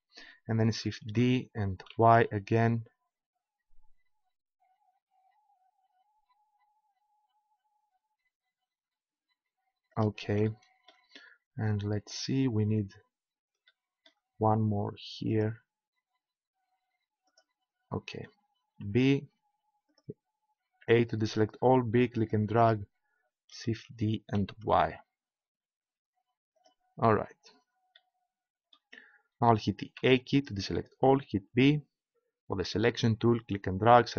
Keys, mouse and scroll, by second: 1.1 shift+d, 10.5-12.7 drag, 14.5 middle click, 15.3-18.8 right drag, 18.8 b, 20.6 a, 21.1 b, 23.8 shift+d, 26.9-28.4 drag, 30.0 a, 31.2 b.